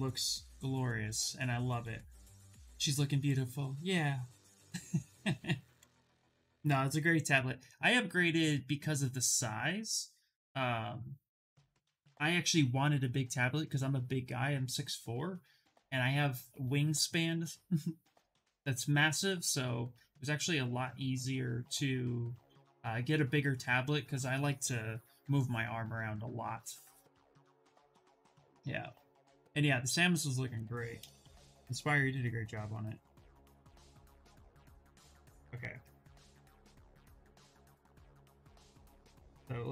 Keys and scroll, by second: 32.5 shift+f, 36.8 s, 38.3 z, 38.6 s.